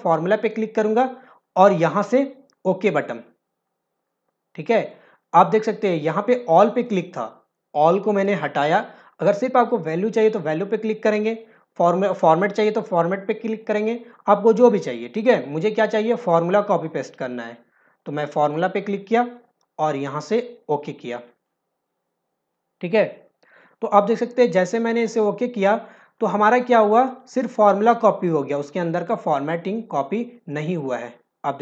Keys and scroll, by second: 23.5 ctrl+alt+v.